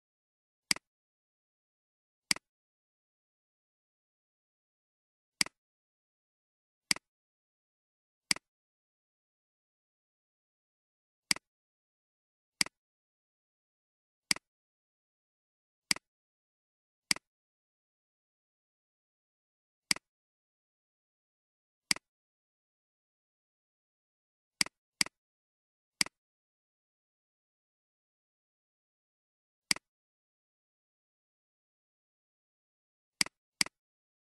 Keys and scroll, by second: 1.2 /, 3.0 Return, 4.7 =, 6.0 *, 7.4 /, 9.2 Return, 10.3 =, 11.8 *, 13.7 /, 14.8 Return, 18.4 Return.